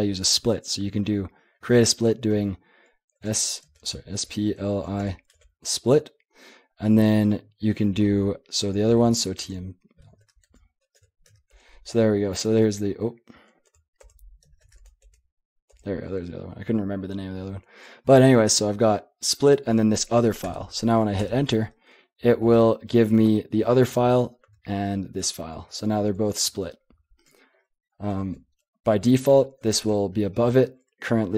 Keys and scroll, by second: 3.1-5.3 typing, 9.0-11.3 typing, 11.5 Tab, 12.5-14.6 typing, 15.0 Tab, 15.7 Tab, 20.4 Return, 21.2 Return, 22.1-23.0 j, 23.0-23.4 k, 24.0 k, 24.6 ctrl+j, 24.8 ctrl+k, 25.2 ctrl+j, 25.6 ctrl+k, 25.8 ctrl+j, 26.1 ctrl+k, 26.4 ctrl+j, 26.9 ctrl+k, 28.2 ctrl+j, 28.9 ctrl+k, 29.3 j, 30.7 ctrl+k.